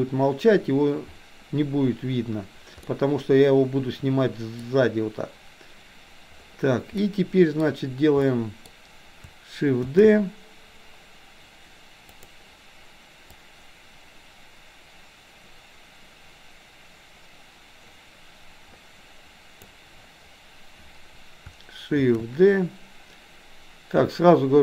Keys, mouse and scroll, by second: 2.9-4.7 middle drag, 7.0 middle click, 8.4 middle click, 9.8 shift+d, 13.4-19.7 drag, 22.0 shift+d.